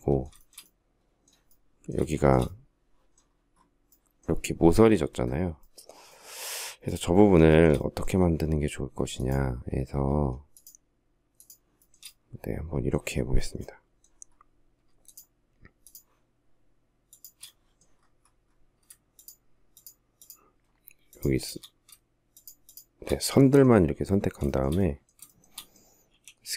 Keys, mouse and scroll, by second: 1.3 shift+middle click, 6.7 shift+middle click, 8.4 shift+click, 9.8 shift+click, 10.6 shift+click, 11.0 shift+middle click, 11.1 shift+double middle click, 14.3 shift+click, 15.1 shift+click, 16.3 shift+click, 18.4 shift+click, 19.0 shift+click, 19.4 shift+click, 19.9-20.3 shift+scroll, 20.3 shift+click, 20.6 shift+click, 21.6 shift+click, 21.9 shift+click, 22.2 shift+scroll, 23.7 shift+middle click, 24.5 shift+middle click, 25.3 s.